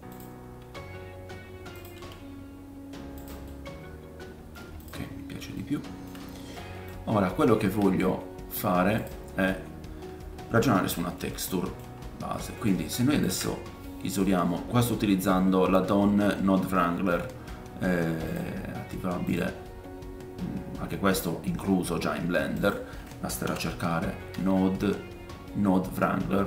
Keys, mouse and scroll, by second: 0.6 r, 1.9-5.6 right drag, 1.9 g, 3.4 middle click, 4.8 click, 4.8 middle click, 5.2-5.6 scroll up 2, 5.6-7.0 shift+middle drag, 6.2-6.5 scroll up 2, 7.0-7.3 drag, 7.0-7.3 scroll down 1, 7.3-10.4 shift+right drag, 8.9 click, 9.5-11.7 scroll down 6, 10.6 middle click, 11.7 middle click, 11.9-12.3 scroll up 2, 12.3 middle click, 13.7 ctrl+shift+click, 15.4-26.4 drag, 18.2-26.4 middle drag, 18.2-26.4 right drag.